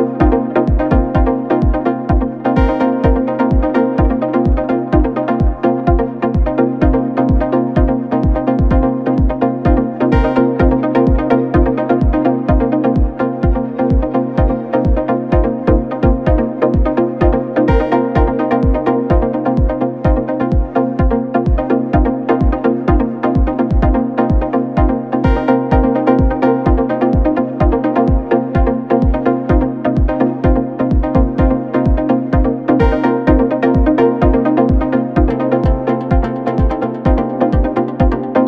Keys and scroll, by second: 0.6 2, 1.2 2, 4.9 F1, 6.7 Delete, 8.6 Delete, 10.1 Delete, 13.2 Escape, 19.4 F9, 20.2 ], 20.7 ctrl+d, 20.8 Escape, 22.3 4, 23.4 F1, 25.7 2, 32.1 Escape, 33.3 4.